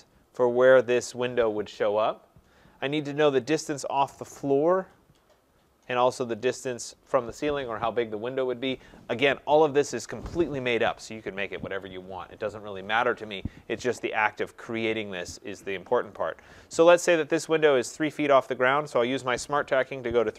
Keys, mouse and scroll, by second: 16.2 click, 19.8-20.3 typing.